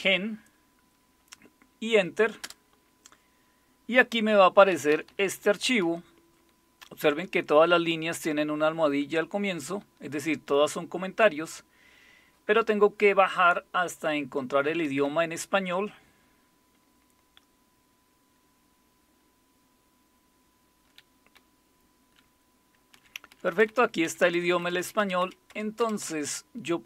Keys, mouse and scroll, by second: 2.4 Return, 4.7 Down, 4.9 Down, 5.1 Down, 5.2 Down, 5.4 Down, 5.8-7.2 Down, 7.6 Page_Up, 8.1 Up, 8.3-9.6 Up, 10.2-14.6 Down, 15.0-20.8 Down, 21.3-22.1 Down, 22.9 Down, 23.5 Down, 23.7 Down, 24.0 Up, 24.2 Up, 24.4 Up, 24.6 Up, 24.8 Up, 25.2 Up, 25.5 Up, 26.0 Up.